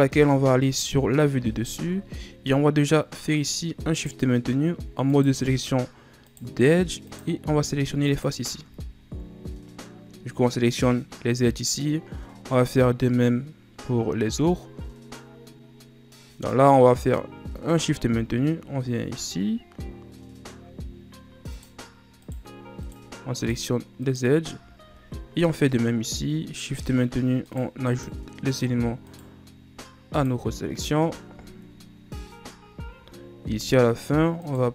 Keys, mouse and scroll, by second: 0.7 shift+scroll down 1, 1.1-1.9 scroll up 3, 1.9 ctrl+scroll down 1, 2.9-3.9 scroll up 1, 4.1 right click, 5.3 shift+right click, 6.5 shift+right click, 7.2 shift+right click, 8.2 shift+right click, 9.0-9.3 ctrl+scroll up 5, 21.7 shift+Right, 21.7 right click, 22.4 right click, 23.0 shift+Right, 23.0 right click, 23.5 shift+right click, 24.2 shift+Right, 24.2 right click, 25.2-25.8 ctrl+scroll up 4, 27.6 shift+right click, 28.1 shift+right click, 28.6 shift+right click, 29.2 shift+right click, 30.3 shift+right click, 31.7-34.6 ctrl+scroll up 5, 34.6 shift+right click.